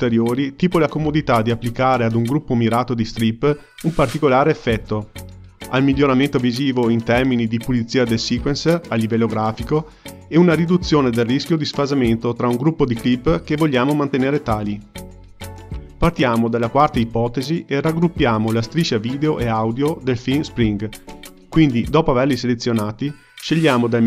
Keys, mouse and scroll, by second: 1.0 ctrl+g, 2.1 click, 3.3 click, 5.5 ctrl+g, 6.6 click, 7.6-10.4 drag, 11.9 ctrl+g, 13.3-15.9 drag, 17.6 click, 21.1-23.9 ctrl+middle drag, 23.9 click.